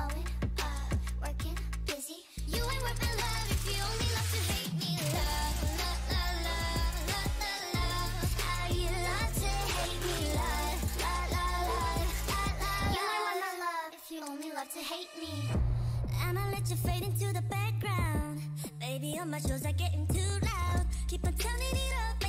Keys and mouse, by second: 0.4 right click, 0.8-3.3 middle drag, 1.8 f, 2.6 w, 4.8 w, 6.5 click, 8.1 g, 8.9 click, 9.1 g, 9.7 click, 9.8 g, 10.4 click, 10.4 a, 12.3 f, 13.1 f, 13.7 f, 13.8 a, 15.4 f, 15.6 a, 15.9 middle click, 16.7 right click, 17.3 s, 17.9 middle click, 18.7 KP_1, 19.9 z, 21.5 e.